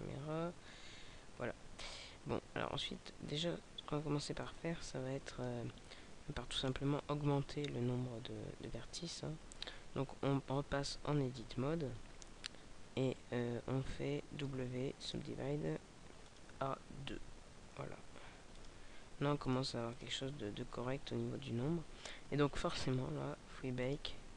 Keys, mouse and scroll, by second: 0.5 alt+a, 4.4 click, 6.7 right click, 8.5 Tab, 9.5-10.1 scroll up 4, 11.7-14.0 scroll down 4, 14.2 w, 19.4 click, 20.0 click, 20.8 scroll up 2, 22.7-23.1 scroll down 2, 23.8 click.